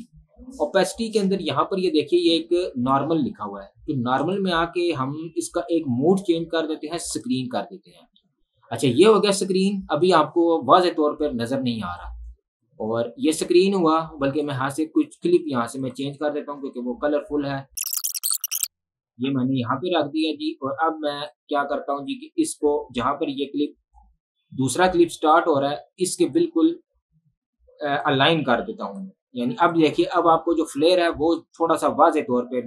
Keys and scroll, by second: 2.8 ctrl+1, 2.9 Escape, 16.7 Delete, 18.0 ctrl+k, 18.1 ctrl+x, 19.2 ctrl+v.